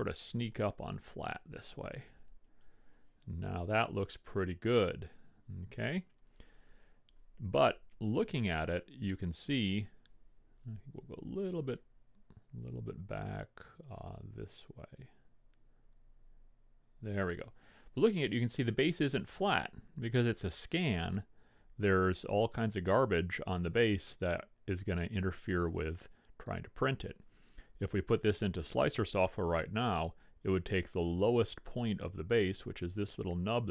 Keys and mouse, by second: 3.8 KP_3, 5.9 KP_1, 10.6 r, 14.0 r, 18.2-21.7 middle drag.